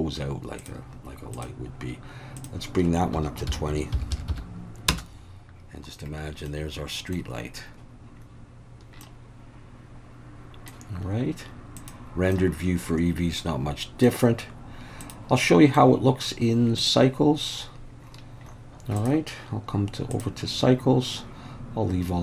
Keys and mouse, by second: 0.6 click, 2.4-5.4 drag, 4.1 d, 6.5-7.2 middle drag, 9.0-10.7 middle drag, 11.8 click, 12.3-14.1 middle drag, 15.0 click, 15.5 middle click, 16.8 click, 19.0-20.3 drag.